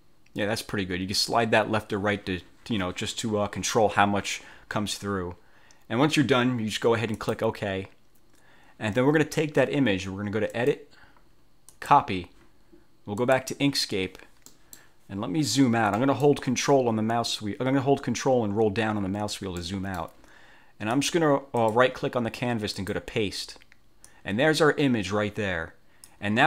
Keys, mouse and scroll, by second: 7.2 click, 10.7 click, 11.8 click, 13.4 click, 14.6 middle click, 14.8 click, 16.1 middle click, 18.6-19.1 ctrl+scroll down 4, 19.8 ctrl+middle click, 19.9 ctrl+click, 20.0 middle click, 21.0 click, 21.7 right click, 22.9 click, 24.2-26.4 drag.